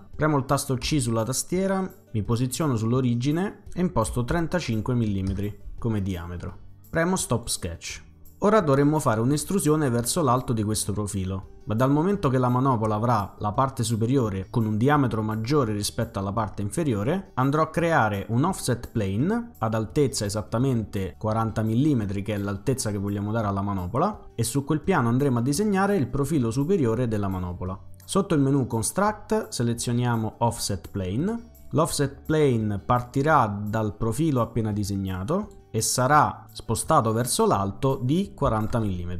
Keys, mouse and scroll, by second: 0.9 c, 2.4 click, 3.9-5.4 typing, 5.3 Return, 6.7-7.6 typing, 7.3 click, 28.9 click, 30.4 click, 35.2 click, 35.9-37.3 drag, 38.5 typing.